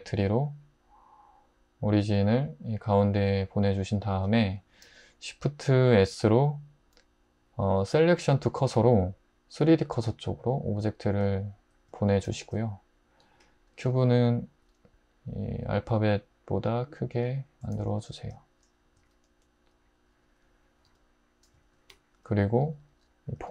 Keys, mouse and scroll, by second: 6.0 shift+s, 14.5 s, 17.8 alt+z, 19.0 s, 20.9 `, 21.9 `, 22.7 Tab, 23.4 s.